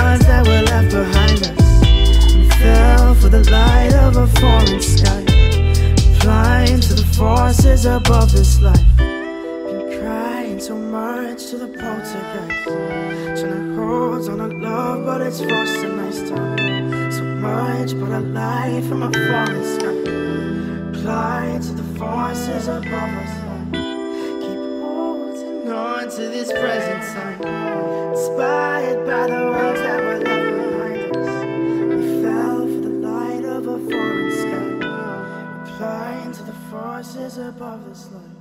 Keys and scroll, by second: 4.2 ctrl+g, 37.4 ctrl+alt+s.